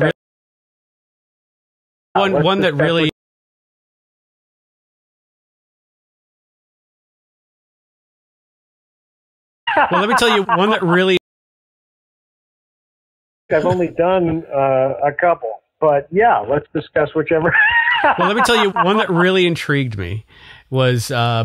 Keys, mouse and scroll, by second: 0.0 space, 2.1 space, 3.0 space, 4.0 Delete, 4.6 click, 5.3 Delete, 5.6 click, 6.4-9.2 drag, 9.5 click, 9.6 space, 11.1 space, 11.2-12.3 drag, 12.7 click, 13.2 click, 14.3 click, 15.1 click, 15.8 ctrl+s.